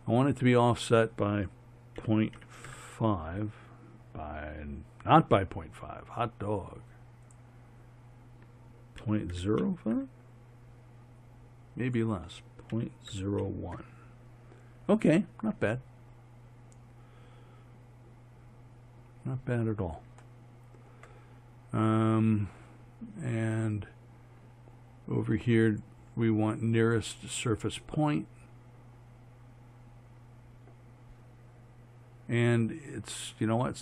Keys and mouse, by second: 0.5-2.5 drag, 7.3-9.5 drag, 11.9-14.0 drag.